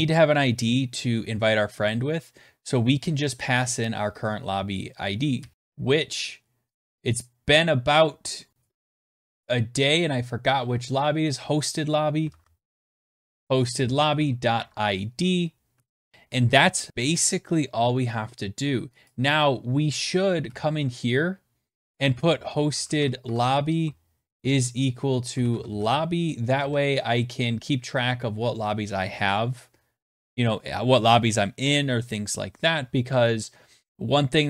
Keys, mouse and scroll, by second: 4.9-5.8 typing, 5.5 right click, 6.5 click, 6.9 click, 8.3 click, 8.5 middle click, 9.0 middle click, 11.6-16.2 typing, 12.5 scroll, 15.4 Right, 18.7 click, 20.0 click, 20.1 Return, 21.4-26.7 typing, 34.2-34.4 scroll.